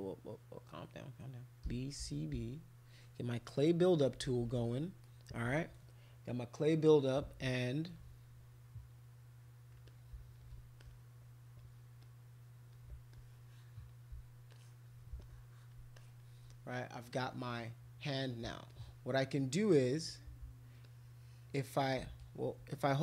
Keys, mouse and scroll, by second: 1.4-2.8 typing, 4.1 [, 4.3 [, 4.4 [, 4.5 [, 9.9 shift+click, 10.8 alt+click, 12.0 click, 13.1 alt+click, 14.5 alt+click, 15.2 alt+click, 16.0 alt+click, 18.7-19.7 ctrl+drag, 20.8 ctrl+shift+click, 21.7 ctrl+shift+click.